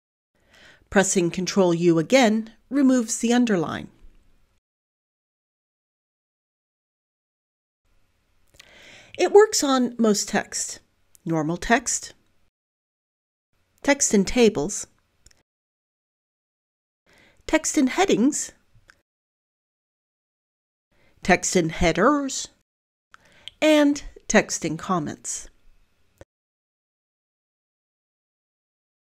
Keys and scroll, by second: 0.0-2.4 typing, 6.6 ctrl+u, 10.1 ctrl+u, 14.1 ctrl+u, 18.3 ctrl+u, 22.5 ctrl+u, 27.5 ctrl+u.